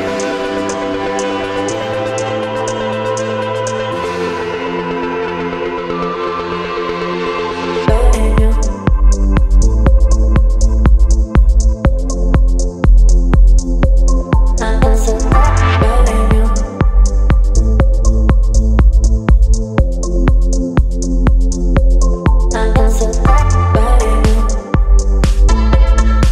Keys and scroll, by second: 2.3 space, 20.1 Return, 24.7 ctrl+t.